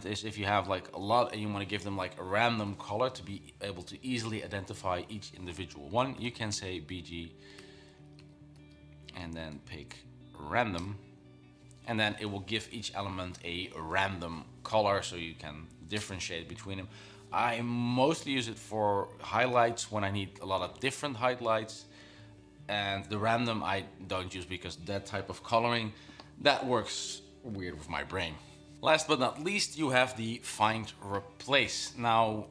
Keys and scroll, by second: 0.4 shift+Down, 6.1-11.1 typing.